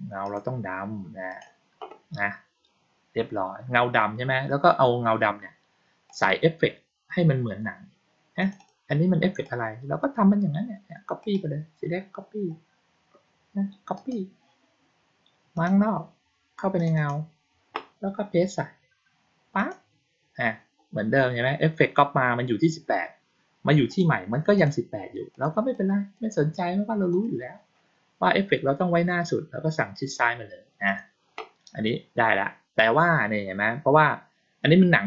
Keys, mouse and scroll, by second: 0.1 click, 1.2 click, 6.0 click, 8.3 click, 8.5 click, 9.3-9.9 drag, 11.1 right click, 13.9 click, 15.5 click, 16.7 click, 16.9 click, 19.5 click, 23.8 click, 24.5 click, 25.2 click, 25.6-26.1 drag, 27.0 click, 30.8 click.